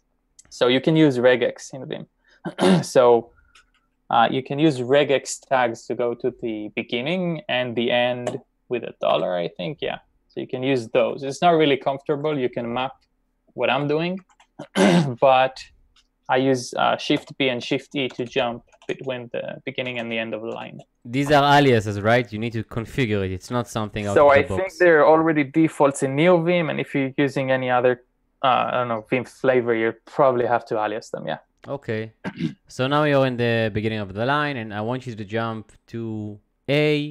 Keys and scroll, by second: 9.2 shift+4, 11.2 typing, 13.7 typing, 17.0-18.1 typing, 19.8 shift+b, 20.6 b.